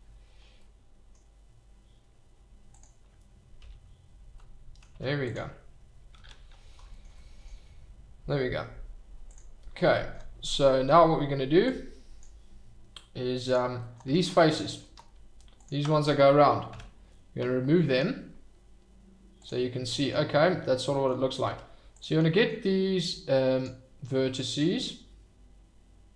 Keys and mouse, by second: 0.6 middle click, 2.7 click, 3.6 h, 4.4-4.8 middle drag, 4.9 Tab, 6.1 ctrl+z, 7.1-7.4 middle drag, 9.3 click, 11.6 click, 14.0 Tab, 16.7 x, 21.4 Tab, 22.9 click.